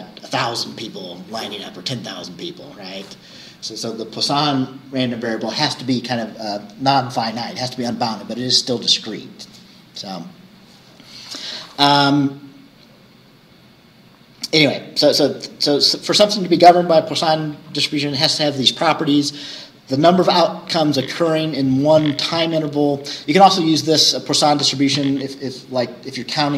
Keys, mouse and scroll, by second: 1.3-5.5 scroll up 1, 5.5-9.8 scroll up 1, 9.8-12.7 scroll up 1, 12.7-14.1 scroll up 1, 14.1-18.3 scroll up 1, 18.3-22.6 scroll up 1, 22.6-26.5 scroll up 1.